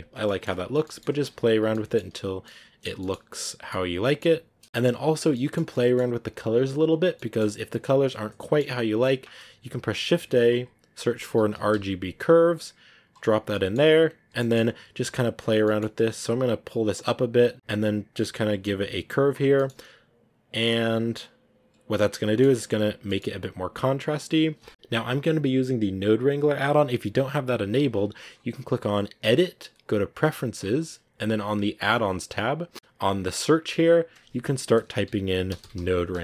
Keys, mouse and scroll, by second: 0.0 scroll up 1, 0.1-1.3 middle drag, 0.7 scroll down 2, 1.6 ctrl+s, 2.1 a, 2.3-5.1 middle drag, 5.1-6.0 scroll down 8, 6.6 click, 7.3-12.4 middle drag, 13.4-14.2 scroll up 7, 13.4 middle click, 15.0 middle click, 16.7-19.4 drag, 19.4 middle click, 19.8 scroll down 2, 21.1-23.7 drag, 23.7 middle click, 23.7-26.9 scroll up 2, 26.9-30.5 scroll up 1, 30.5 scroll up 1, 30.5-36.2 drag.